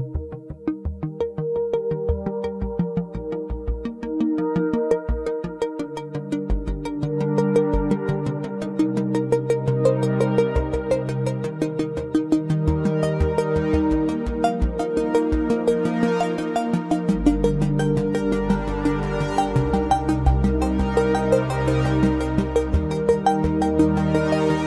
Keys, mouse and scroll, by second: 0.2 Tab, 0.9 s, 4.4-5.0 shift+middle drag, 5.0 Tab, 5.4 scroll up 2, 5.8 click, 6.2 shift+click, 7.3 s, 11.9-13.8 shift+middle drag, 21.2 Tab, 22.1 scroll down 1, 23.5 Delete.